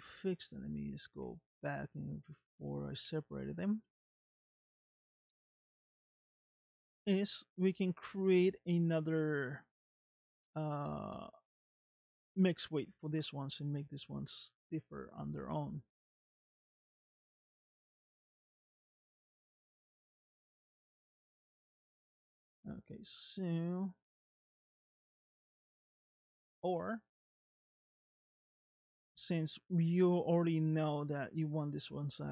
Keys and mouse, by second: 0.5 ctrl+z, 1.3 ctrl+z, 2.0 ctrl+z, 3.3 ctrl+z, 4.2 ctrl+z, 5.2-6.5 middle drag, 7.3 middle click, 18.2-21.1 middle drag, 23.2 middle click, 29.0 middle click.